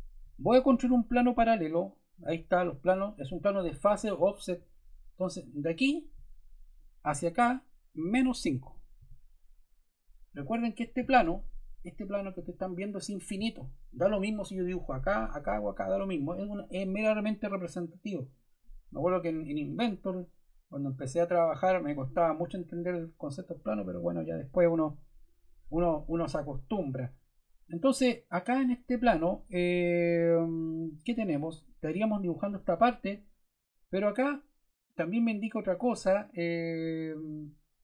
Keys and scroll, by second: 8.9 5.